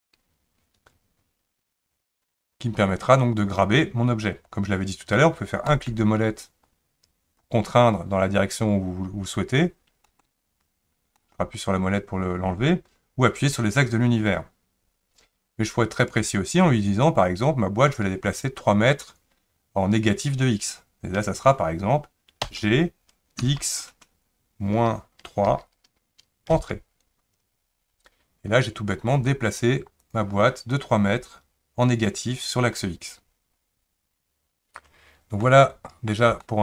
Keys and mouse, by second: 22.4 g, 30.0 click, 35.4-36.1 middle drag, 36.4-36.6 shift+middle drag.